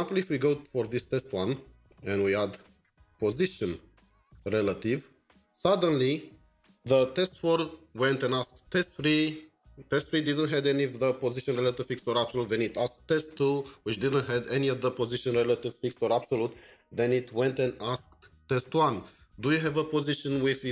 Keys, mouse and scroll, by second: 2.8-5.0 typing.